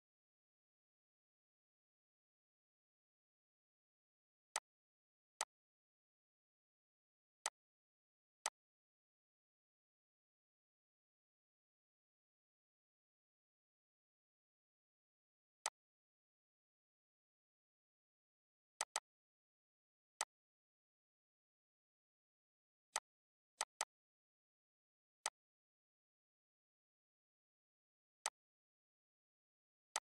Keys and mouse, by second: 4.2-12.7 drag, 15.3 click, 18.4 click, 22.6 click, 27.9 click.